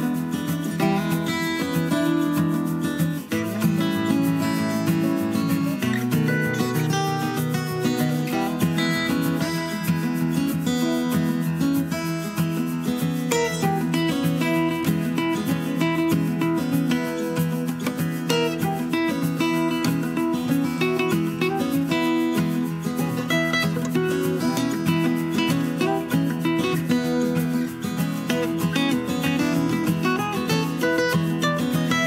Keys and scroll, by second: 6.6 super+a, 22.1 super+d.